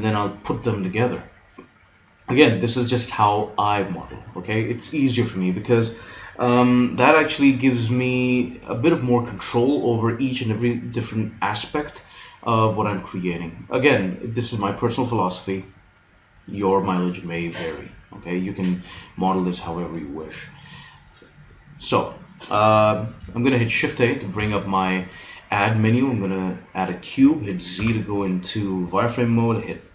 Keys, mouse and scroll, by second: 24.4 shift+a, 27.8 z.